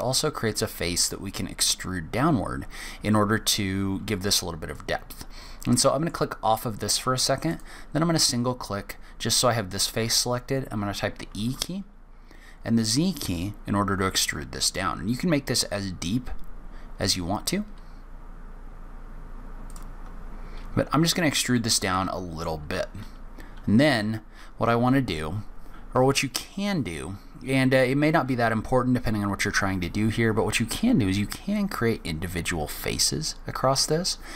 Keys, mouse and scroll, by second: 4.6 click, 5.6 middle click, 7.5 click, 10.0 e, 20.8-21.5 scroll up 1, 21.5 middle click.